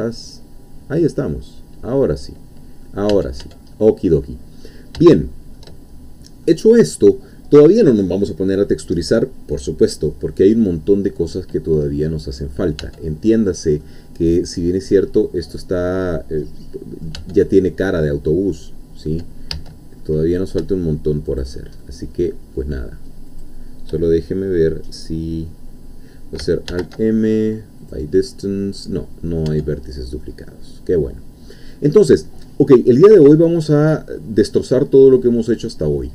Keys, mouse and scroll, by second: 3.1 Tab, 3.7 middle click, 4.6-5.0 scroll up 2, 5.2 shift+middle click, 5.9-6.4 shift+scroll down 2, 6.4-7.4 middle drag, 11.0 scroll down 2, 11.9-12.4 scroll up 2, 12.8 Tab, 13.4 scroll down 2, 13.8-17.2 middle drag, 17.2 Tab, 17.5-18.2 scroll up 1, 18.2-18.5 scroll down 1, 18.7-19.5 scroll up 1, 19.5 1, 20.0 scroll up 1, 21.4 shift+click, 21.8 shift+middle click, 23.4 shift+click, 24.1 shift+scroll down 1, 26.7 alt+m, 27.8 click, 29.5 Tab, 30.2-31.8 middle drag, 31.8-32.1 scroll down 1, 32.2-33.4 middle drag, 33.6-33.9 scroll up 1, 34.1-34.5 scroll down 1, 34.5-36.1 middle drag.